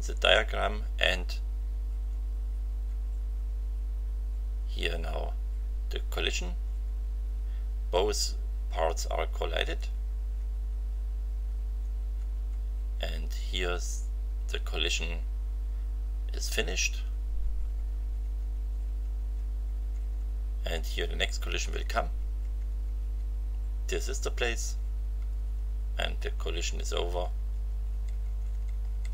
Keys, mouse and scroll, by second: 1.9 Right, 2.7 Right, 6.4 Right, 9.7 Right, 15.3 Right, 16.4 Right, 21.7 Right, 24.5 Right, 26.4 Right.